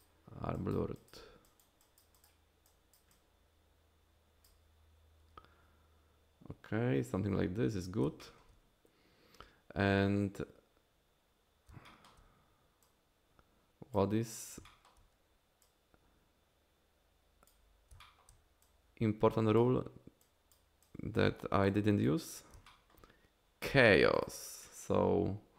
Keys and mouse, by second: 0.5 click, 0.9 click, 1.4 click, 1.8 click, 2.1 click, 3.1-4.4 drag, 7.6 middle click, 8.2 shift+click, 11.9 shift+click, 12.8-13.9 drag, 14.7 shift+click, 15.6-17.5 drag, 18.0 shift+click, 18.6 click, 20.2 click, 20.8 click, 21.6 click, 22.7 shift+click, 22.7 shift+middle click, 24.2 click.